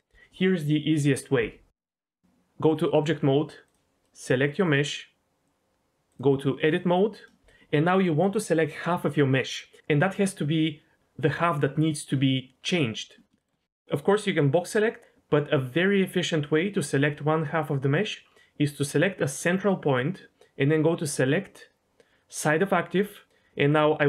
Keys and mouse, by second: 1.7 Tab, 2.7-3.1 drag, 4.0 middle click, 6.2-6.8 drag, 10.2 click, 13.4 shift+middle click, 19.2 click, 21.0-22.5 drag, 23.7-24.0 drag.